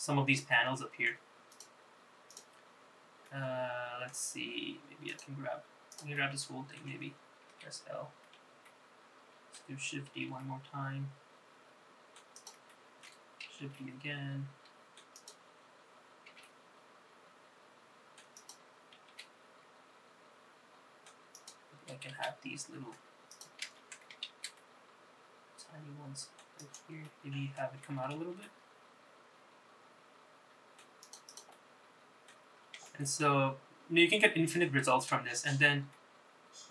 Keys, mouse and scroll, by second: 1.6 click, 2.4 click, 3.3 middle click, 5.2 click, 6.0 click, 6.3 middle click, 7.6 l, 8.1-8.5 scroll down 1, 8.7 shift+middle click, 10.2 shift+d, 12.8 shift+middle click, 13.7 shift+d, 16.4 s, 19.2 g, 22.2 shift+d, 23.8 ctrl+z, 24.5 shift+d, 27.1 middle click, 28.5 g, 31.4 click, 31.7 middle click, 32.7 scroll up 2, 32.9 shift+middle click, 33.9 scroll down 2, 35.3 Tab, 35.3-36.0 scroll down 3, 36.0 middle click.